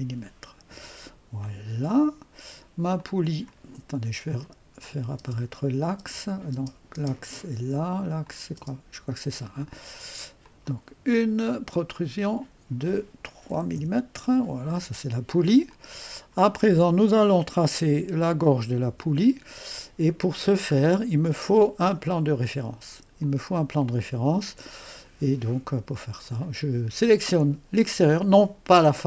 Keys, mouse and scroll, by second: 1.9 click, 3.0 click, 4.8-6.9 typing, 4.8 click, 8.2 click, 8.4-9.2 typing, 10.4 click, 12.1 click, 13.3-14.1 typing, 15.7-16.8 drag, 18.8 typing, 20.2-20.9 typing, 20.5-21.3 scroll down 1, 21.3 click, 23.1-26.4 typing, 23.2-25.2 drag, 25.9 click.